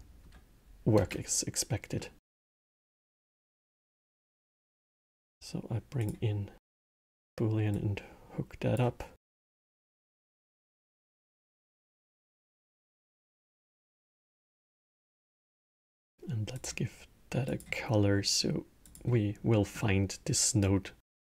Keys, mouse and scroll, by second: 0.8 space, 1.8-2.6 middle drag, 2.6 shift+a, 7.5-9.5 drag, 9.9 click, 10.3 click, 12.3-14.1 drag, 14.7 click, 16.3 click, 17.2 click, 19.2-20.3 middle drag, 20.3-21.2 drag.